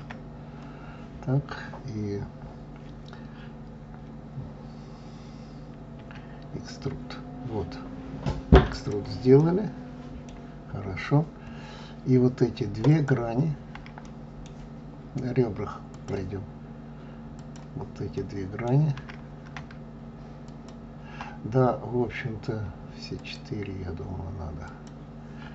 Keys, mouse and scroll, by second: 9.3-10.7 middle drag, 10.7-11.4 scroll up 3, 11.4-12.8 scroll down 1, 12.8 click, 13.9-15.8 middle drag, 15.8 click, 17.3 click, 18.1-20.4 middle drag, 20.4 shift+click, 23.1 shift+click, 24.6 shift+click.